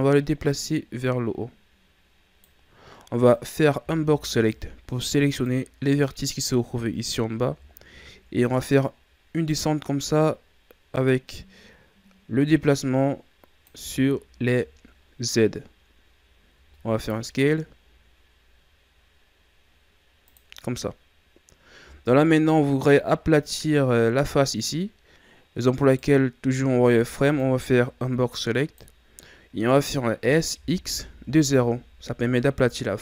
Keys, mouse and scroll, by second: 3.3 right click, 3.8 b, 7.6-8.6 shift+scroll down 3, 9.5-12.5 drag, 14.1 shift+scroll down 2, 16.5 s, 22.2-24.6 shift+scroll up 2, 25.8 right click, 26.9 b, 30.1 s.